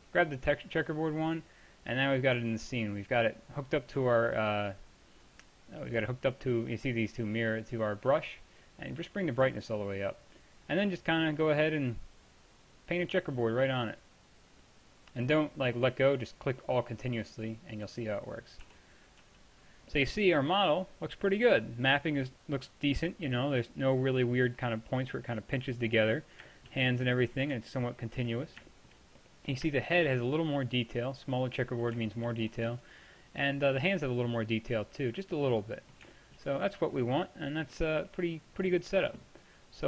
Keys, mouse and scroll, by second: 2.4-6.0 middle drag, 2.4 t, 13.6 middle click, 18.7 t, 19.3 t, 27.9 middle click, 28.3 middle click, 29.1 middle click, 29.2 middle click, 31.7 middle click, 31.9-33.4 middle drag, 33.4 click, 34.6-36.2 middle drag, 36.8 middle click, 37.1 middle drag, 37.5 middle click, 38.9-39.8 drag.